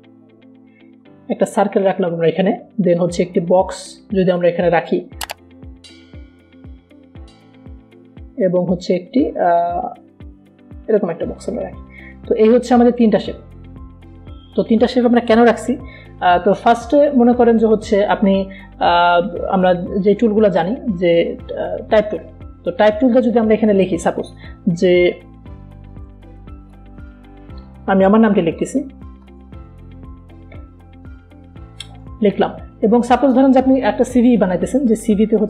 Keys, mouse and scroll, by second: 0.7-2.9 shift+drag, 2.9 v, 3.2-5.6 drag, 5.6 right click, 6.4-10.4 drag, 8.5 shift+Num_Lock, 10.4-13.3 drag, 13.3 v, 13.8-16.1 drag, 21.5 click, 21.8 right click, 24.1 click, 27.5-32.3 typing, 33.4-35.4 drag.